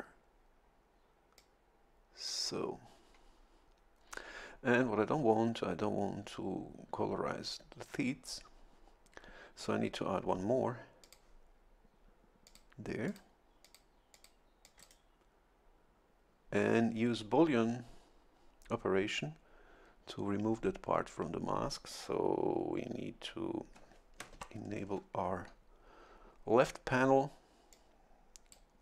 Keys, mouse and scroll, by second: 1.4-2.5 drag, 11.0 click, 12.4 click, 13.0 click, 13.6 click, 14.1 click, 14.6 click, 24.3 ctrl+shift+l, 27.7-28.8 drag.